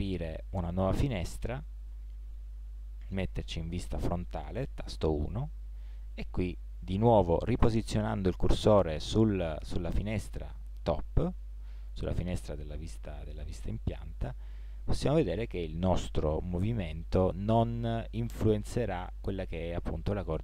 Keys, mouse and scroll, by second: 1.9 t, 3.1 KP_1, 13.0 t, 14.3 g.